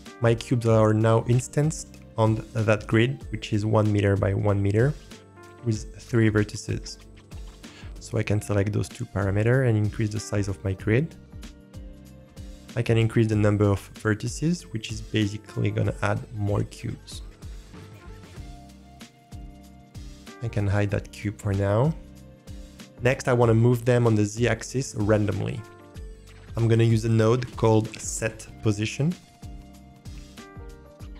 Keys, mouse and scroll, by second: 1.3-2.3 scroll up 3, 2.8 click, 8.1-12.1 drag, 12.2 ctrl+z, 12.3 ctrl+z, 12.9-18.6 drag, 19.8-20.7 drag, 21.4 click, 27.4 shift+a.